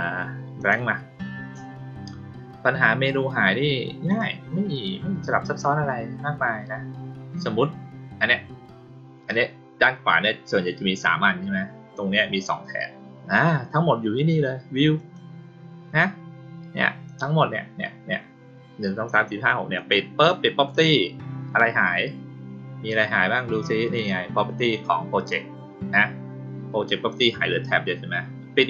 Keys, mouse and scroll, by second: 0.5 click, 4.0 click, 14.9 click, 19.7 click, 28.5 click.